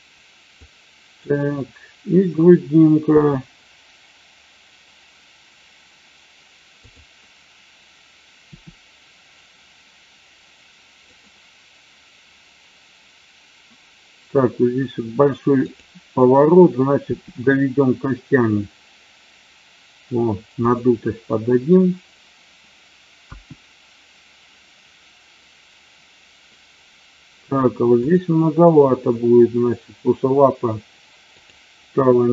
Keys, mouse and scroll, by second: 0.6-1.3 drag, 2.9 g, 6.8 click, 8.4 r, 11.1 click, 15.6 click, 16.9 g, 20.5 click, 31.3 click.